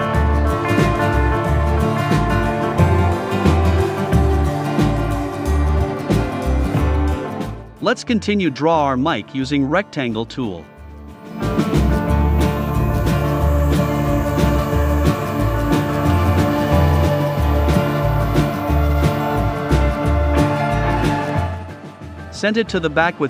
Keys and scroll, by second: 1.1 v, 11.9 a, 16.2 v, 20.4 super+[.